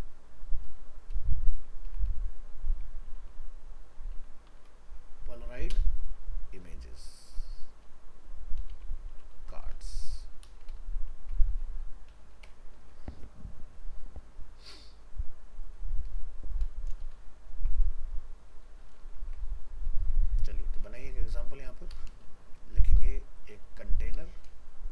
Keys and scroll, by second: 19.2 ctrl+s.